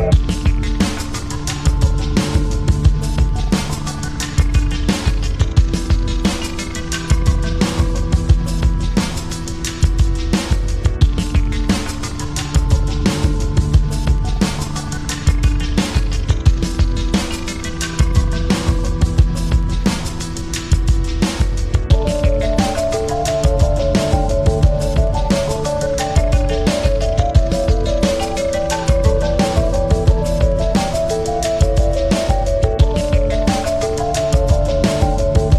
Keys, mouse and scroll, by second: 3.8 ctrl+shift+l, 6.3 ctrl+v, 7.5 ctrl+shift+v, 9.7 Return, 16.7-19.5 typing, 19.8 Tab, 20.2 Return.